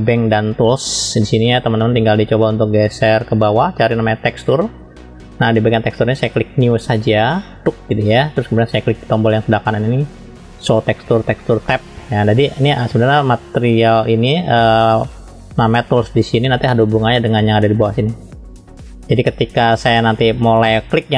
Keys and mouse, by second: 4.4 click, 7.6-21.1 drag.